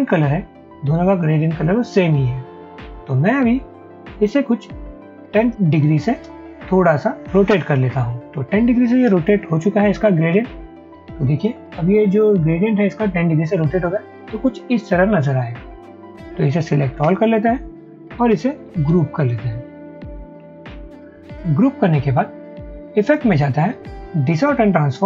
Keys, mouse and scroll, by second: 5.9-6.3 typing, 10.3 Return, 17.1 ctrl+a, 18.9 ctrl+g.